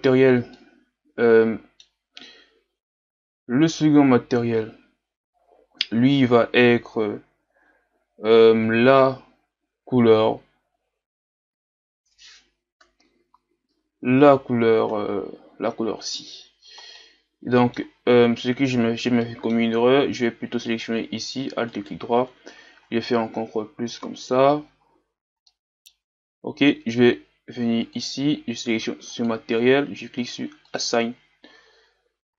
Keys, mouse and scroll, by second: 0.6-4.0 middle drag, 6.2-7.6 scroll up 1, 7.6-8.5 scroll up 1, 8.5-9.1 scroll up 1, 9.1-10.2 scroll up 1, 10.2-10.7 scroll up 1, 10.7-12.4 scroll up 1, 12.4-14.2 scroll up 1, 14.2-15.0 scroll up 1, 15.0-15.8 scroll down 2, 15.8-17.0 scroll down 1, 17.0-18.3 middle drag, 18.3-18.8 scroll down 2, 18.8-19.2 scroll up 2, 19.2 middle click, 19.7-20.7 scroll up 1, 20.7-22.9 alt+right drag, 22.9 ctrl+KP_Add, 25.5-29.3 middle drag, 29.3 click, 30.9-31.9 drag, 31.9 Tab.